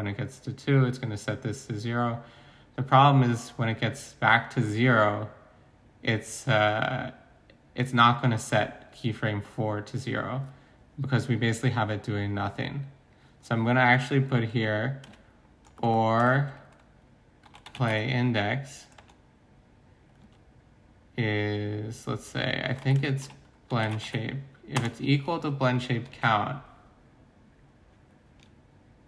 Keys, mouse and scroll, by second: 17.4-17.9 typing, 19.0 Return, 22.4-24.0 typing, 24.8 Return, 25.7 typing, 26.0 ctrl+s.